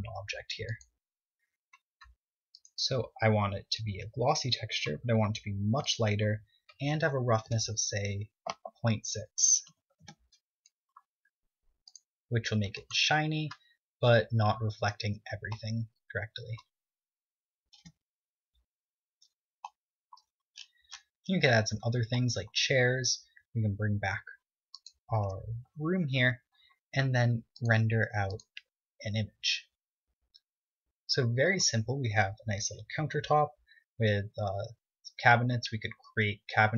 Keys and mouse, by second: 14.0 click, 16.8 middle click, 18.8 z, 20.5-21.9 middle drag, 27.0 KP_0, 27.3-28.2 middle drag.